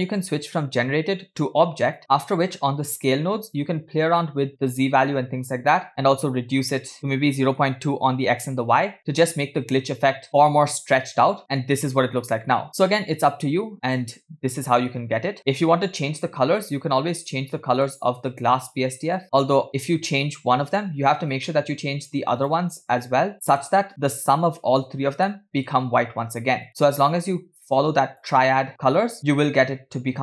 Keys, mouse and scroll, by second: 1.4-2.0 drag, 3.7-5.8 drag, 6.8-8.0 drag, 9.8-10.1 scroll down 2, 10.1-10.5 scroll up 2, 11.1 scroll down 2, 11.4 click, 11.4-11.9 scroll up 1, 11.4 space, 15.7 space, 16.6-17.9 middle drag, 18.5-19.2 drag, 21.5 middle click, 22.4 click, 25.3 middle click, 26.7 click.